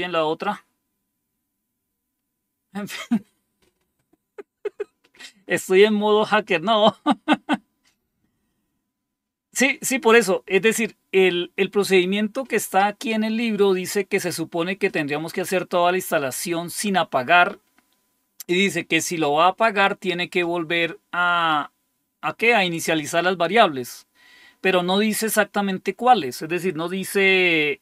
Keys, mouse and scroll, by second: 0.8-1.5 typing.